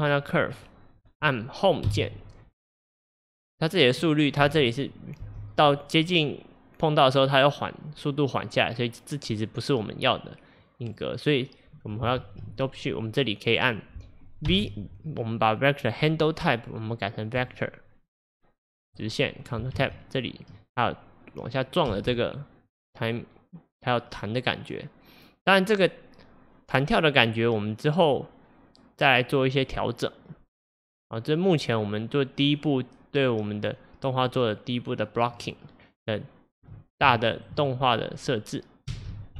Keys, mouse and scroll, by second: 0.5-1.9 scroll down 1, 1.9 Home, 2.8-4.5 scroll down 1, 4.5 space, 5.2 space, 5.7-8.7 drag, 12.2 ctrl+Tab, 13.1-17.5 drag, 14.5 v, 19.8 ctrl+Tab, 21.9 space, 37.1-38.9 shift+middle drag, 38.9 space.